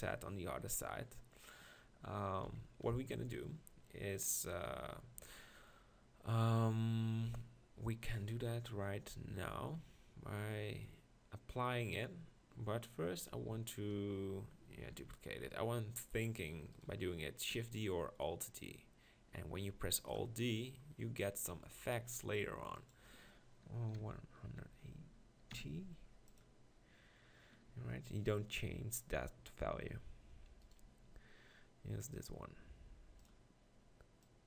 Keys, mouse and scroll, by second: 2.5 KP_7, 16.0 shift+d, 17.6 r, 29.9 g, 31.1 g.